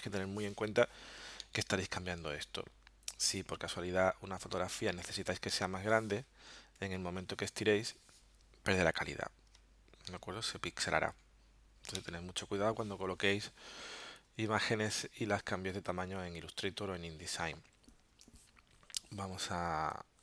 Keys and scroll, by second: 1.4 alt+super+0, 18.2 super+Tab.